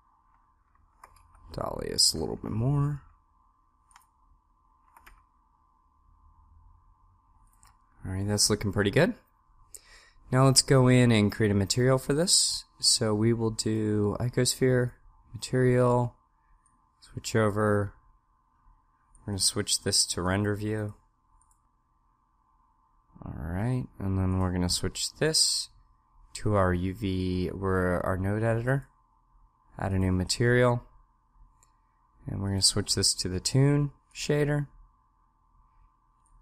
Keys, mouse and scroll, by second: 0.9 g, 4.0 right click, 4.9 g, 13.6-15.2 drag, 17.0 click, 17.5 click, 21.7-22.7 drag.